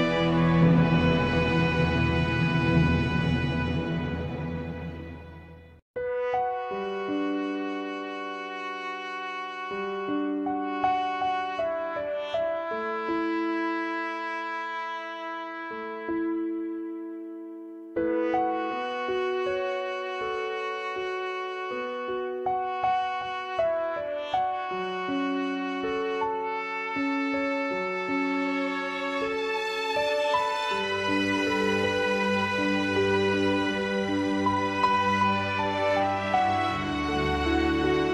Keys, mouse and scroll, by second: 0.2-2.0 drag, 3.3 click, 4.1 shift+click, 4.6 shift+click, 7.6-9.5 drag, 10.1-11.9 drag, 12.8 shift+click, 13.6 g, 15.6 shift+click, 16.0 g, 19.2 click, 21.6 shift+click, 22.1-24.0 middle drag, 24.0 click, 25.1-26.3 drag, 26.3-28.2 middle drag, 28.2 shift+click, 28.8 g, 30.1-30.9 middle drag, 30.9 click, 31.3 g, 32.9-34.9 middle drag, 36.1 click, 36.8 g.